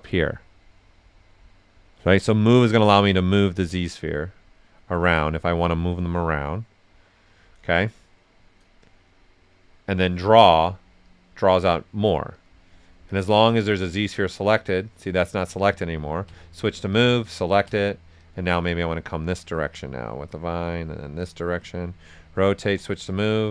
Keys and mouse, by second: 2.4 right click, 2.9 click, 3.4 right click, 4.0 click, 5.2 right click, 6.3 click, 7.4 right click, 8.8-10.5 drag, 10.5 q, 11.0 click, 12.3 click, 13.2 click, 14.6 right click, 15.6 right click, 16.2 w, 16.9 click, 17.6 q, 18.1 click, 19.4-20.8 drag, 20.8 click, 21.5 right click, 22.6 w, 23.0 click.